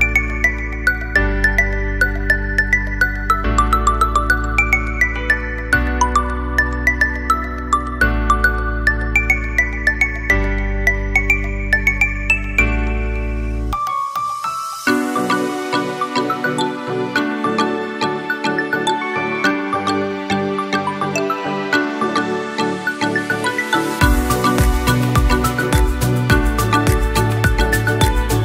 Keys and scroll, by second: 13.7 ctrl+=, 23.7 ctrl+0.